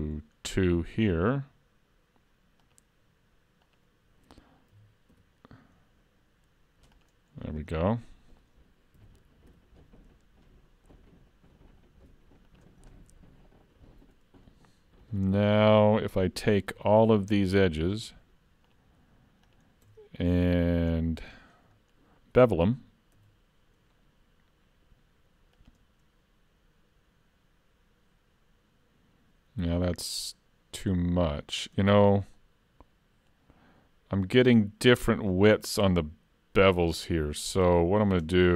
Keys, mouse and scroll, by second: 4.7 s, 7.8 middle click, 9.0 s, 14.5 middle click, 18.7 alt+shift+click, 20.6 middle click, 21.1 scroll up 2, 21.4 shift+middle click, 21.8 middle click, 23.2 ctrl+e, 32.4 middle click, 36.7 ctrl+z, 38.2 Tab.